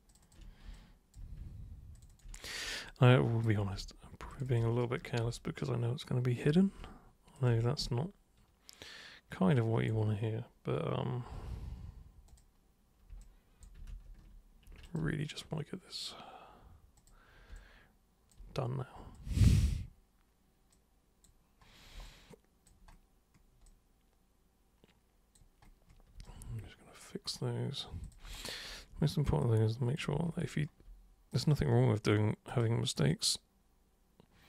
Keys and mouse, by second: 0.1 ctrl+shift+super+click, 0.7-1.1 alt+super+drag, 2.0 ctrl+shift+super+click, 2.1 ctrl+shift+super+drag, 2.8-3.4 alt+super+drag, 4.3 ctrl+shift+super+click, 5.4-6.4 alt+super+drag, 7.4 ctrl+shift+super+click, 7.9-9.9 alt+super+drag, 12.3 super+click, 13.2 alt+super+click, 13.9 ctrl+super+z, 14.9 ctrl+shift+super+click, 16.9 super+click, 17.6-18.3 alt+super+drag, 19.1 super+click, 20.7 super+click, 22.0 alt+super+click, 23.7-25.3 alt+super+drag, 26.2 super+right click, 28.0 super+click, 28.8 super+w, 29.4 super+click, 31.3 super+click, 32.5 super+click, 33.1-34.4 super+drag.